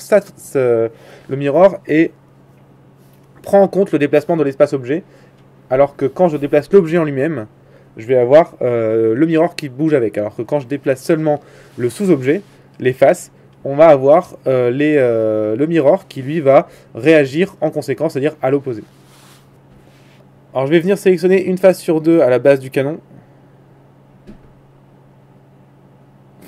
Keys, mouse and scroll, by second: 5.0-6.9 drag, 6.6 z, 6.9-8.4 middle drag, 7.2 z, 8.4 a, 9.0 Tab, 9.6 Tab.